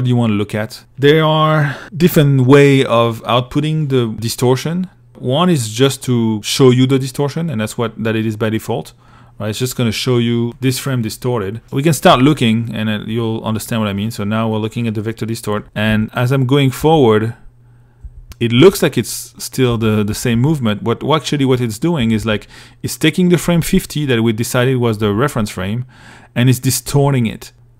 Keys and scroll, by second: 11.3 i, 15.1 Right, 16.0 Right, 17.3 Right, 17.8 Right, 18.9 Right, 21.2 Right, 24.2 Right, 26.1 Right, 27.0 Right.